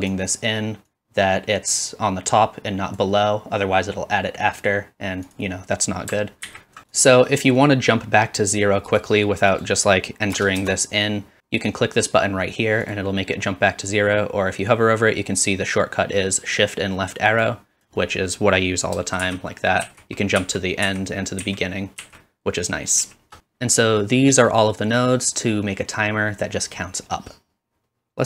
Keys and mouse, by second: 5.4-6.9 middle drag, 6.5 alt+a, 6.9-9.0 drag, 9.0 middle click, 9.5-19.5 drag, 19.2 shift+Left, 19.8 shift+Right, 20.4 shift+Left, 20.9 shift+Right, 21.4 shift+Left, 22.0 shift+Right, 23.0 shift+Left, 23.3-28.1 drag.